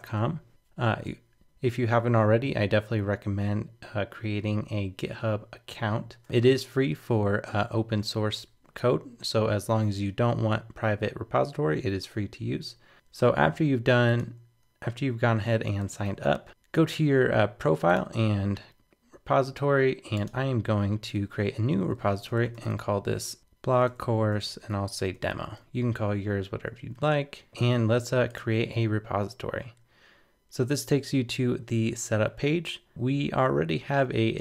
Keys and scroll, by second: 16.1 super+w, 16.5 super+t.